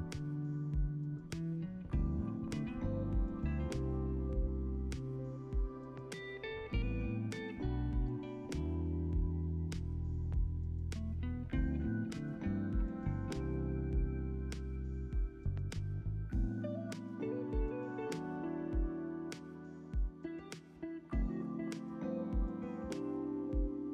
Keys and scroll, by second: 4.0 alt+x, 7.5 ctrl+s, 12.6 ctrl+c, 13.0 ctrl+v, 15.4 ctrl+c, 15.6 ctrl+v, 19.7 alt+x, 21.9 alt+z, 23.6 ctrl+c.